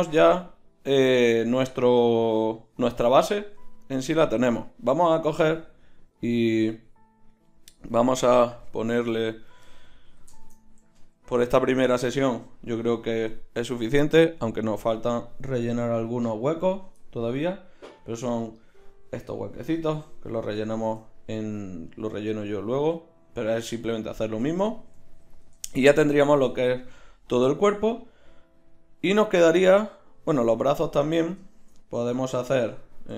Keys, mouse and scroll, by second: 6.1-8.6 right drag, 8.6-10.4 drag, 10.4-31.5 right drag.